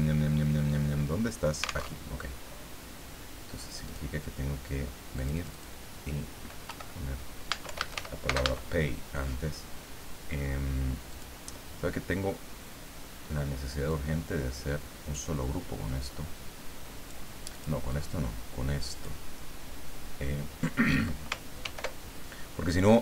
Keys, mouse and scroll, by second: 1.8 alt+Tab, 3.8 click, 5.2 click, 6.6 Home, 7.4-8.4 typing, 11.1 click, 13.9-15.1 drag, 16.0-17.4 drag, 17.6-19.2 drag, 21.6 ctrl+g.